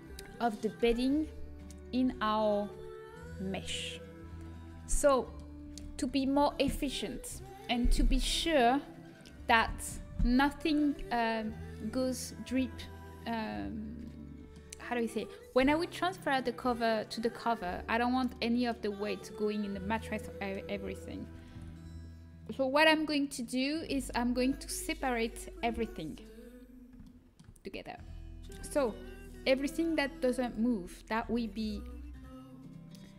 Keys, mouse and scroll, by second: 1.5-10.4 middle drag, 13.4-25.5 middle drag, 21.5 ctrl+s, 26.5-28.4 middle drag, 28.4 Tab, 30.7-33.1 drag.